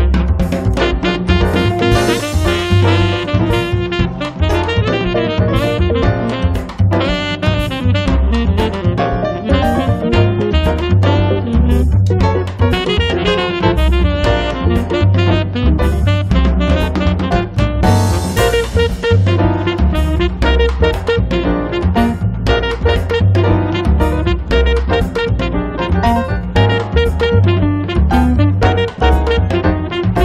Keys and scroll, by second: 1.7 p, 7.8 l, 10.5 space, 11.7 m, 13.1 Return, 13.5 space, 15.7 m, 17.1 space, 22.4 l.